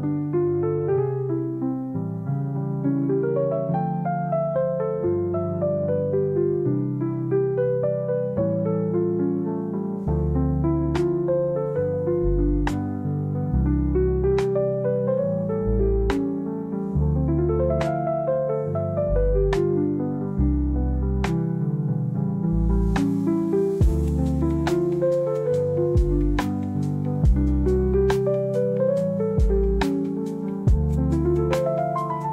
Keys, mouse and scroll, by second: 1.8-4.0 drag, 7.6 click, 10.0-11.1 drag, 11.9-14.8 drag, 16.6-17.9 drag, 19.5 alt+click, 21.2 click, 22.2 click, 24.4-25.4 drag, 28.4 space, 29.3-29.6 drag, 31.6-32.3 drag.